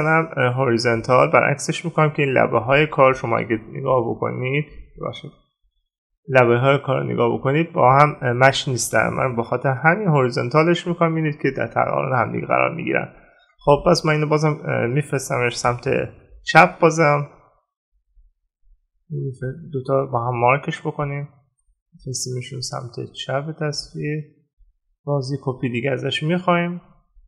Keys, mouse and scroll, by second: 3.0 right click, 9.8 right click.